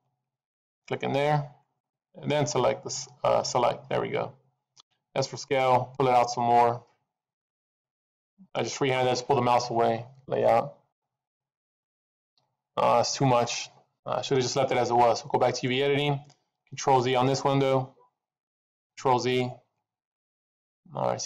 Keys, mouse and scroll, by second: 10.1 click, 10.9 middle click, 11.4-12.0 scroll up 6, 12.6-13.1 scroll down 3, 13.1 middle click.